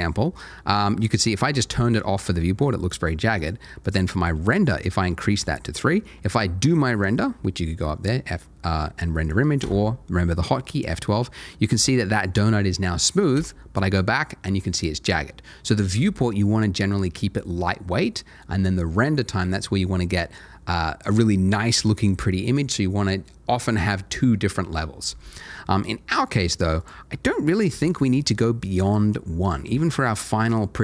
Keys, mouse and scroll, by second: 1.4 middle click, 3.3 click, 3.8 double click, 7.0 click, 9.6 F12, 11.2 scroll up 1, 13.3 Escape, 26.8 click, 27.9 double click.